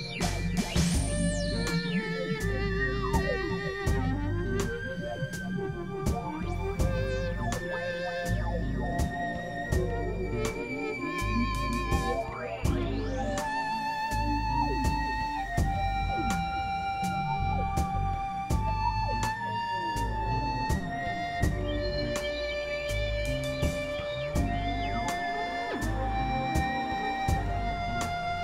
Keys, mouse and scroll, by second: 0.4 click, 1.1 click, 1.8 click, 2.2 middle click, 2.9 middle click, 3.3 click, 4.0 KP_Divide, 4.4 middle click, 5.0 right click, 5.2 Tab, 5.6 Tab, 6.2 click, 6.5 KP_Divide, 7.5 KP_1, 7.9 KP_3, 9.0 x, 9.0 click, 9.6 middle click, 10.4 click, 11.0 KP_3, 12.0-14.8 drag, 14.7 x, 15.0-16.4 drag, 16.6 click, 18.4-21.2 drag, 21.8-24.0 drag, 24.6-26.3 drag, 26.5-28.4 drag.